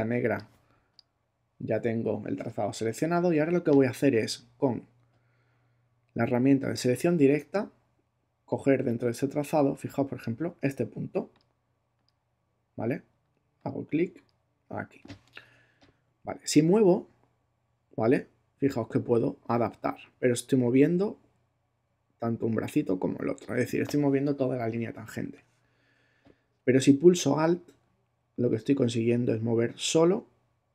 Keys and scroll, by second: 25.2 super+z.